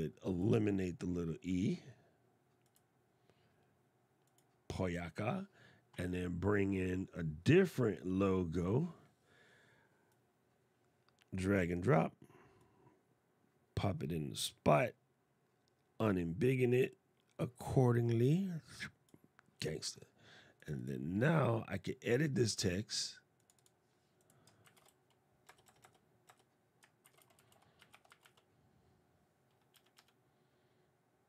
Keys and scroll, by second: 24.1-24.9 typing, 26.7 shift+t.